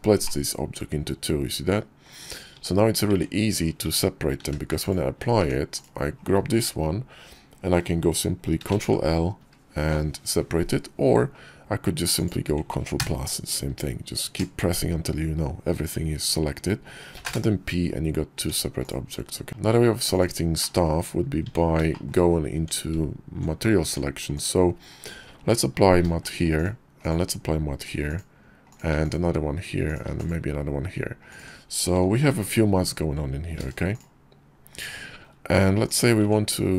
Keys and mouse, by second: 0.1 middle click, 0.2-1.5 middle drag, 1.5-1.9 drag, 2.4 Tab, 2.9 Tab, 3.7 Tab, 4.2 q, 5.2 Tab, 5.6 click, 8.5 ctrl+l, 12.0 click, 12.8 ctrl+KP_Add, 17.0 p, 18.2 Tab, 18.7 click, 19.9 click, 20.5 drag, 21.3 Tab, 21.8 shift+middle click, 22.4 Tab, 23.7 Tab, 24.2 click, 25.9 alt+m, 26.8 click, 27.7 alt+m, 28.6 click, 28.7 alt+m, 30.1 alt+m, 31.1 click, 32.2 click, 33.4 alt+m, 35.7 click, 36.1 Tab.